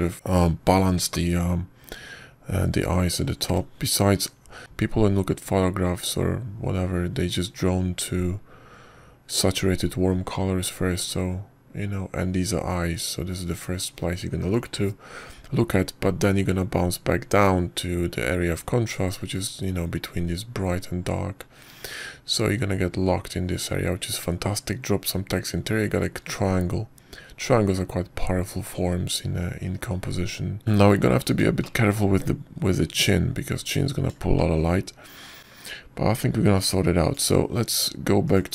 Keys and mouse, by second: 5.0-7.7 middle drag, 31.3 shift+middle drag, 33.5 shift+middle click, 36.3 shift+middle drag, 38.4 click.